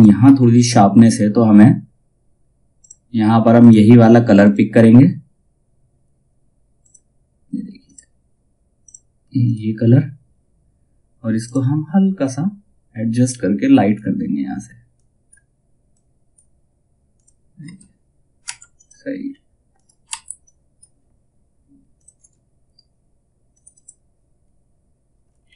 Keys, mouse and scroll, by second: 2.3 click, 6.3-16.6 drag, 17.1 space, 18.3 click, 18.8-19.2 scroll down 1, 19.2 click, 19.6 F2, 19.9-21.5 drag, 21.7 space, 23.0 click, 25.0 ctrl+z, 25.3 space.